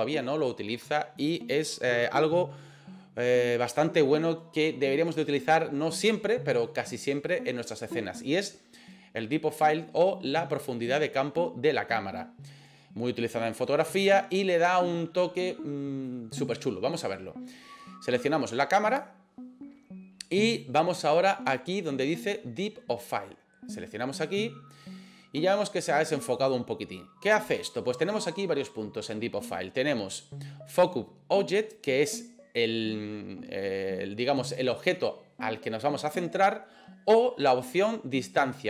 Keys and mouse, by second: 18.9 click, 24.3 click.